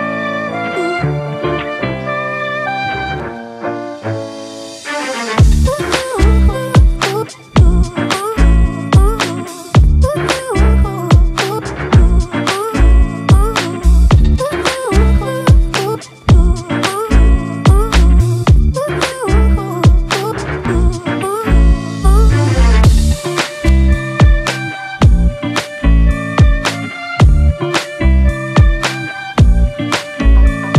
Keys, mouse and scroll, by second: 0.0-0.9 scroll down 2, 1.2 alt+click, 7.6 right click, 11.3 typing, 11.8 double click, 20.5 double click.